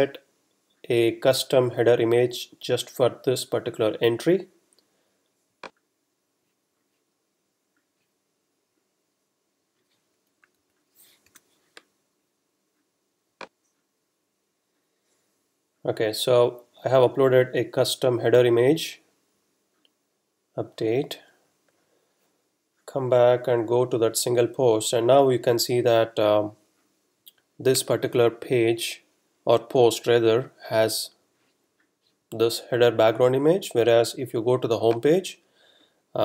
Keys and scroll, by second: 10.6 Down, 11.2 Return.